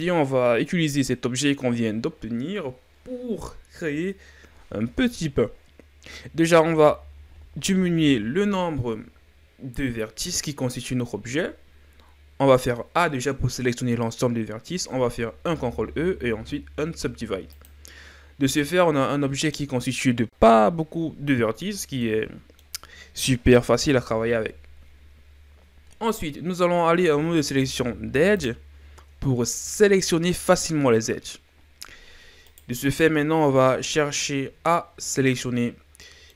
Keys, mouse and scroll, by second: 6.7 a, 7.3 a, 15.4 ctrl+e, 18.3 scroll down 2, 18.5-20.9 middle drag, 22.0-23.7 middle drag, 23.7 KP_7, 27.4 ctrl+Tab, 29.2-30.6 scroll down 2, 31.7-32.4 scroll up 1, 32.4 right click, 32.9-33.5 scroll up 2, 33.5-34.3 scroll down 2, 34.3-35.2 ctrl+scroll down 1, 35.2 scroll down 1, 35.3-36.3 middle drag.